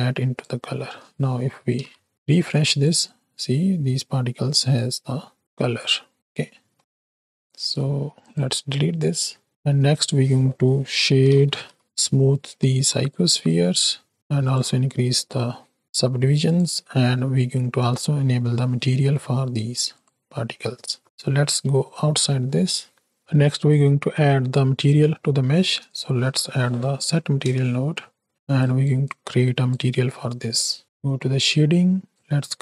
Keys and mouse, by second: 1.6 shift+Right, 1.9 shift+Left, 2.4 click, 3.1 click, 4.6 click, 5.4 click, 6.4 middle click, 7.8 x, 8.1 click, 8.4 x, 8.7 click, 9.5 shift+a, 13.5 click, 14.3 click, 15.3 middle click, 16.3 click, 18.1 middle click, 18.6 shift+middle click, 20.1-21.0 drag, 21.6 Tab, 23.2-23.6 drag, 24.2 click, 25.5 shift+a, 28.7 click, 29.1 click, 29.8 middle drag, 32.1-32.6 drag.